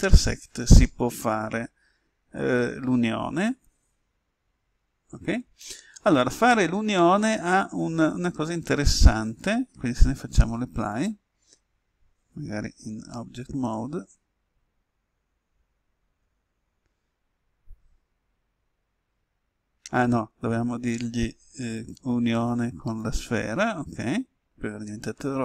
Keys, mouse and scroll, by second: 12.8 Tab, 21.7-25.4 drag.